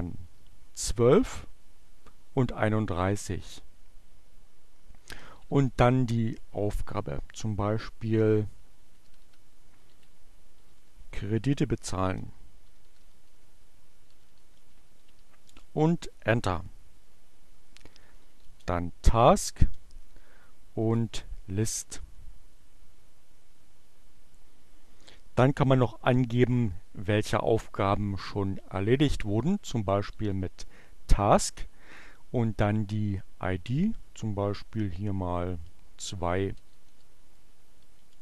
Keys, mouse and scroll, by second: 1.6 3, 1.9 1, 4.1 space, 5.5 shift+2, 8.8-15.5 typing, 16.8-20.2 typing, 29.4-30.5 typing, 34.8 1, 35.1 BackSpace, 37.5 2, 38.1 ,.